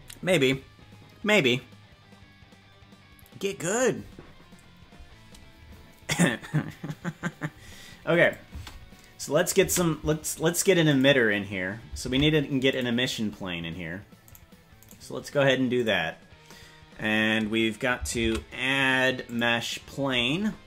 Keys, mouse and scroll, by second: 8.2 click, 8.6 space, 9.6 space, 10.8 click, 12.1 ctrl+Tab, 12.6 click, 14.3 right click, 14.9 right click, 15.7 click, 18.2 shift+a.